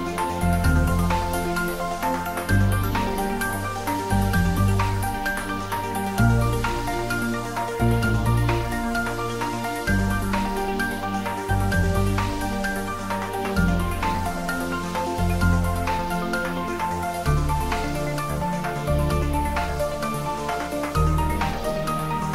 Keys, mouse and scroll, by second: 0.5 scroll down 1, 3.2 click, 4.4 ctrl+s, 5.0 click, 5.7 click, 6.6 click, 8.2-12.8 typing, 10.9 click, 11.2 ctrl+z, 12.6 click, 14.0-16.9 typing, 14.5 click, 15.5 click, 16.6 click, 17.4 click.